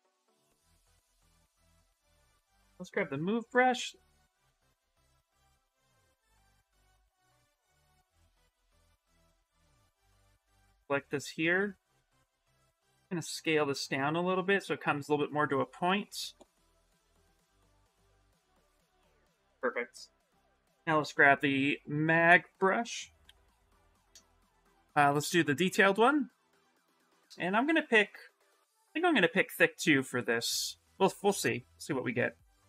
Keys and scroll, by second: 1.9-3.3 typing, 7.5 s, 10.7 w, 14.2 q, 16.8 s, 18.8 s, 20.2 b, 20.6 z, 23.0 b, 29.5 s.